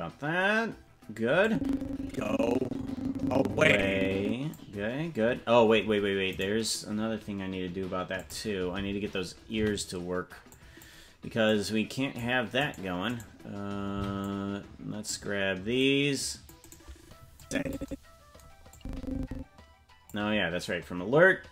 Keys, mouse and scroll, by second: 0.4 ctrl+s, 1.4-4.5 drag, 6.4 right click, 8.2 click, 9.5 c, 13.3 right click, 13.9 c, 17.4 click, 18.7-20.1 drag.